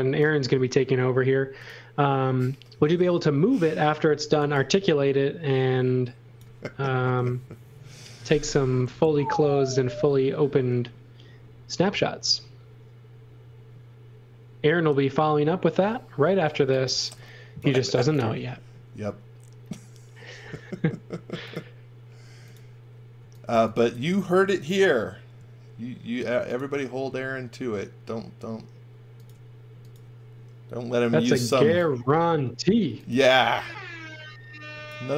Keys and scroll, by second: 1.4 space, 4.0-5.0 typing, 16.5 x, 16.9 v, 18.2 l, 23.1 x, 23.4 v, 24.7 l, 31.0 x, 31.2 v, 32.5-33.5 typing.